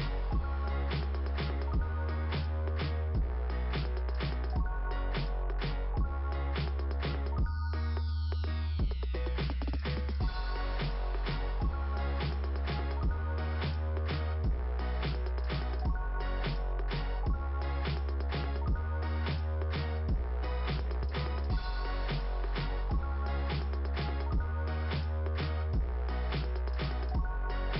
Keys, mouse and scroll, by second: 2.6 click, 3.2 click, 3.6 click, 5.4 click, 5.8 click, 6.3 click, 12.7 click, 12.9 click, 14.2 click, 15.0 right click, 15.3 right click, 15.6 right click, 17.2 click, 18.9 click, 19.1 click, 19.2 double click, 20.2 double click, 20.6-21.9 typing, 23.5 Return, 23.7 Return, 25.4 click, 25.6 click, 26.2 ,, 27.2 right click.